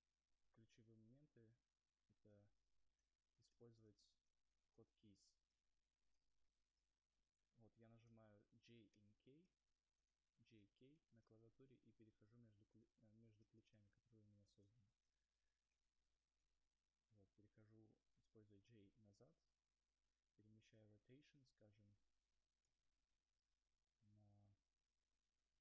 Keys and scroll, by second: 5.4-8.6 typing, 9.8-19.8 typing.